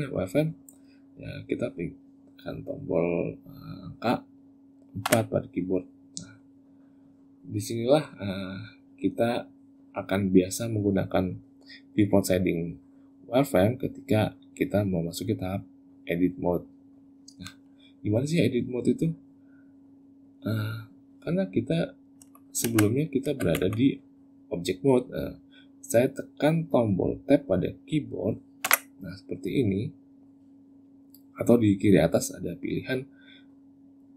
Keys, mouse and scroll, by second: 7.6 click, 22.0 Tab, 22.5 z, 23.3 Tab, 24.7 click, 28.4 Tab, 32.5 click.